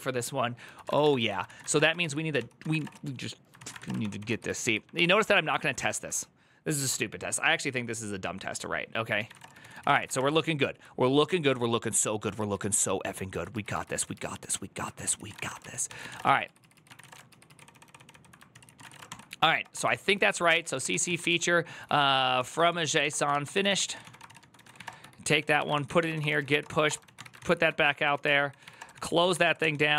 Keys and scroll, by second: 0.4-3.8 typing, 3.3 ctrl+c, 3.8 ctrl+d, 4.0 ctrl+d, 9.3-10.4 typing, 12.2 ctrl+u, 12.5 ctrl+u, 13.3-14.8 ctrl+u, 14.8 ctrl+c, 14.8-29.2 typing, 16.0 ctrl+u, 17.7 ctrl+d, 18.3 ctrl+c, 28.7 ctrl+c, 28.8 ctrl+c, 29.4 ctrl+h, 29.7 ctrl+t.